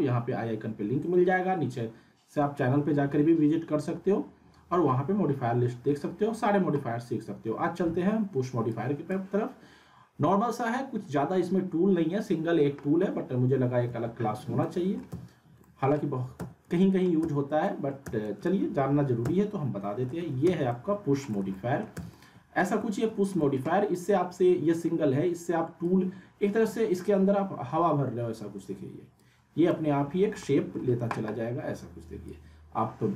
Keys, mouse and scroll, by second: 8.7-9.3 drag, 13.9 z, 14.6-15.2 alt+middle click, 15.1 z, 15.6 middle click, 16.3 z, 16.7 alt+middle click, 17.2 z, 17.6 alt+middle click, 18.0 z, 18.6 alt+w, 19.2 z, 20.0 alt+w, 20.4 z, 20.7-21.3 alt+middle click, 21.4 alt+scroll down 1, 21.5 alt+middle click, 21.9 z, 22.1-22.7 alt+middle click, 23.3 alt+middle click, 25.8-26.4 drag, 29.4 scroll down 1, 29.7-30.3 alt+middle click, 30.4-31.0 alt+middle drag, 32.2-33.1 drag.